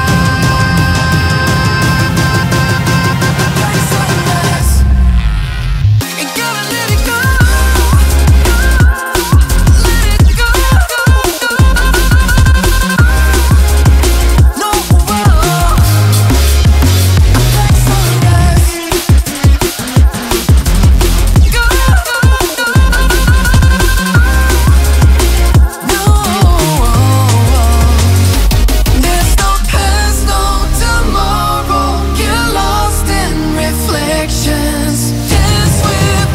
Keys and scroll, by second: 2.0 ctrl+=, 6.4 ctrl+z.